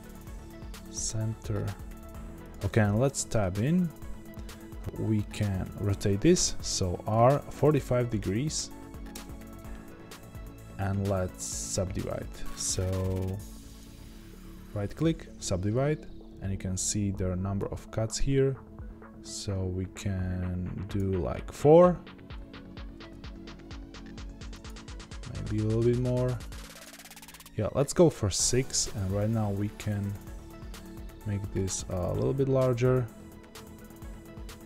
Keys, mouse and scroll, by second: 2.6 Tab, 14.9-18.1 right drag, 18.1-28.7 drag, 28.7 s.